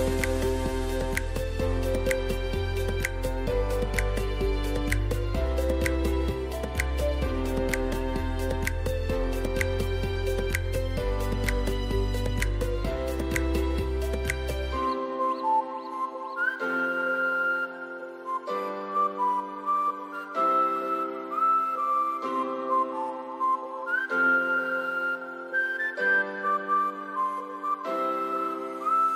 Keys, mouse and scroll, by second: 7.7-10.1 typing, 10.2 click, 11.1 right click, 11.8 click, 12.4-12.7 typing, 13.6 click, 13.8-17.5 typing, 14.9 click, 16.7 click, 17.5 click, 18.7 click, 19.0-21.1 typing, 19.4 click, 20.2 click, 21.0 click, 22.0 scroll down 1, 23.6 scroll up 1, 23.9-24.2 typing, 24.3 click, 25.3-26.7 typing, 26.0 click, 26.7 click, 28.1 ], 28.3 click.